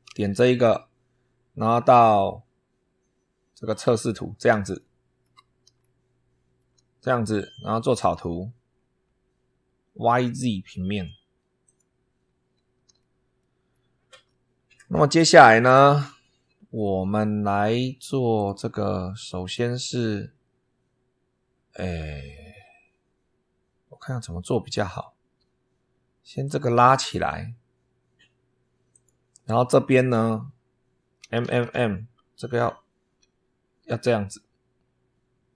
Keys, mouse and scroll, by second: 3.5 click, 4.7 shift+middle click, 5.7-6.7 shift+middle drag, 7.9 click, 8.6-9.1 scroll down 4, 10.8 click, 11.5 click, 12.1-12.6 scroll up 4, 12.9 shift+click, 13.6 shift+click, 18.2 click, 26.3 click, 28.8 click, 31.1 m, 32.9 m.